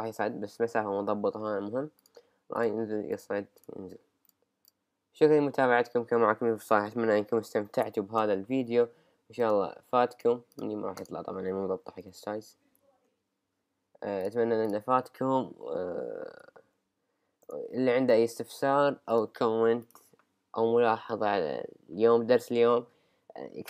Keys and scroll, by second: 7.8 super+Right, 12.0 super+Right, 16.4 super+Right.